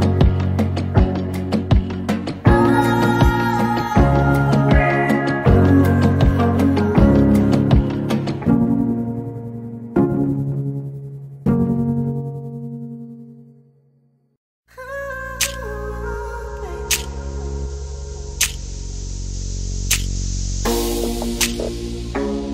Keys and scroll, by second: 0.6 p, 2.8 space, 6.2-7.0 typing, 10.7-11.5 typing, 12.9-14.6 typing, 15.6-19.8 typing, 20.9 r.